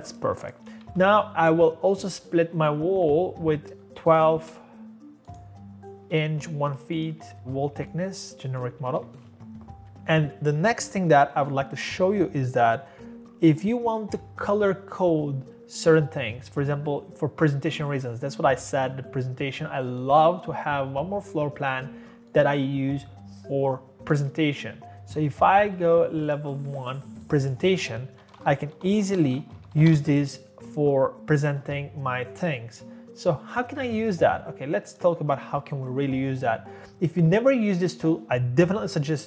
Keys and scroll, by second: 0.0-1.6 typing, 0.6 Escape, 0.7 Escape, 7.1 Escape, 7.3 Escape, 8.8 Escape, 28.0-30.2 typing.